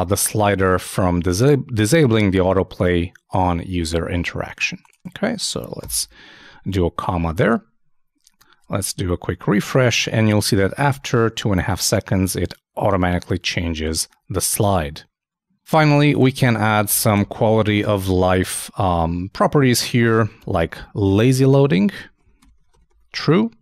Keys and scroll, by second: 6.3 super+,, 6.3 super+s, 7.4 super+s, 7.4 super+Tab, 8.8 super+r, 20.5-22.7 typing.